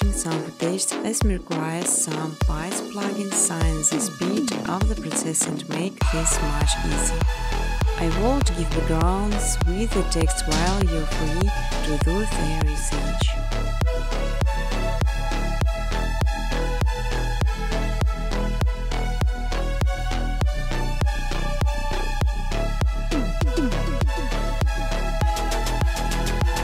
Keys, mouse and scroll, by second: 1.1 click, 1.3 click, 2.8 space, 3.9 space, 5.4 click, 6.1-7.7 typing, 8.9 Tab, 10.6-12.2 typing, 13.3 Tab, 13.9-16.8 Tab, 15.5 Return, 15.9 space, 19.4 space, 19.7 space, 20.9 space, 21.2 space, 21.7 space, 22.0 space, 23.2 space, 24.2 click, 24.2 space, 26.1 space, 26.3 space.